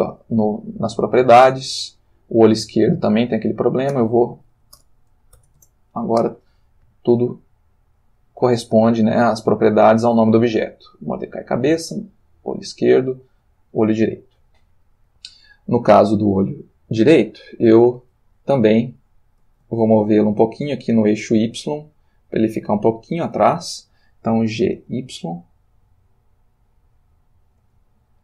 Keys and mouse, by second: 1.9 click, 3.4 click, 3.9 ctrl+v, 4.8 BackSpace, 5.5 shift+e, 5.5 shift+Return, 7.5 middle click, 10.5 click, 11.9 click, 13.1 click, 17.5-19.7 middle drag, 20.0 shift+middle click, 20.5-23.3 ctrl+shift+middle drag, 24.5 g, 24.8 y, 27.7 space.